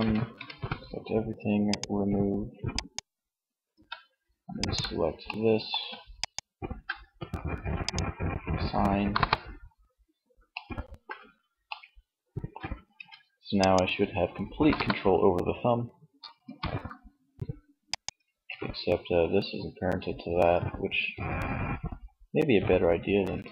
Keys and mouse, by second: 2.7 a, 4.1 middle click, 8.1 KP_1, 12.0 Tab, 13.8 KP_1, 15.8 r, 17.5 ctrl+z, 21.5-23.3 right drag.